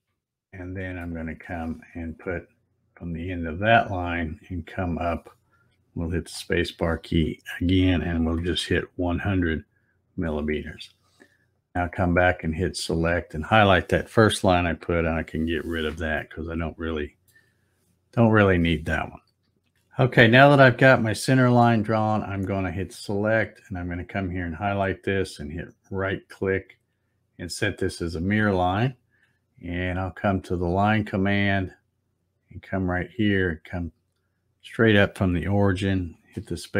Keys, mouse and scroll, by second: 0.0-1.1 shift+middle drag, 3.6-6.4 drag, 6.1 space, 11.6 click, 12.9 click, 16.2 middle click, 18.4 click, 19.6 z, 22.6 click, 25.6 right click, 27.9 click, 30.6 click, 32.7-36.4 drag, 36.2 space.